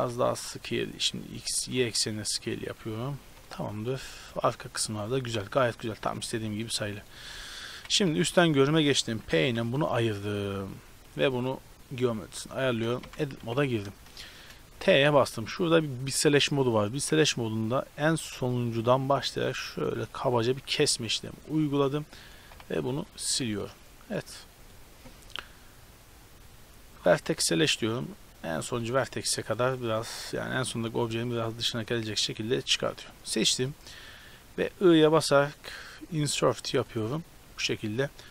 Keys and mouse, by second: 0.1 s, 1.4 s, 3.5 click, 6.6 ctrl+r, 7.6 KP_7, 8.2 z, 9.5 p, 10.2 Tab, 10.4-11.4 right drag, 11.4 Tab, 12.7 t, 13.1 Tab, 13.4 a, 14.8 t, 21.5 z, 22.3 right click, 22.8 x, 28.6-30.6 middle drag, 30.6-32.6 right drag, 31.4-32.8 drag, 31.4-32.6 middle drag, 32.8 a, 33.0 a, 34.4 i, 36.2-36.8 drag, 36.2-36.8 middle drag, 36.2-36.8 right drag.